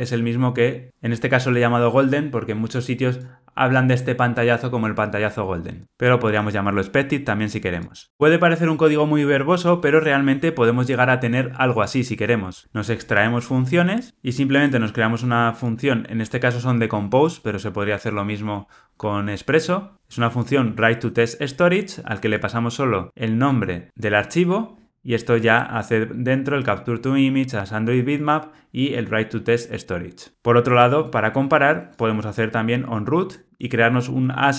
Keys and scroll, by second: 24.8 super+b, 30.3 alt+super+[.